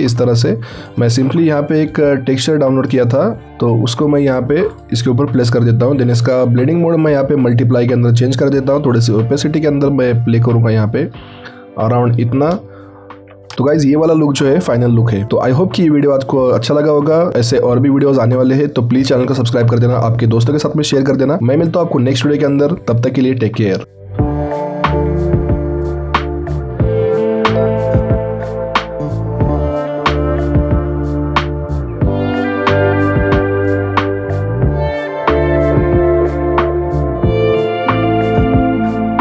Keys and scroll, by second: 0.2 ctrl+shift+t.